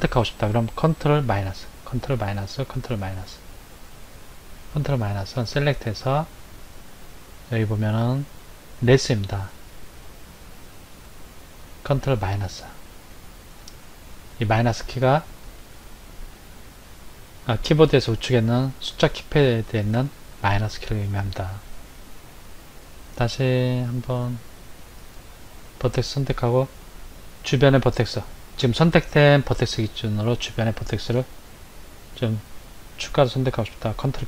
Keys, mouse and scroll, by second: 1.5 ctrl+KP_Subtract, 2.2 ctrl+KP_Subtract, 5.4 click, 22.4 click, 24.2 Left, 25.4 click.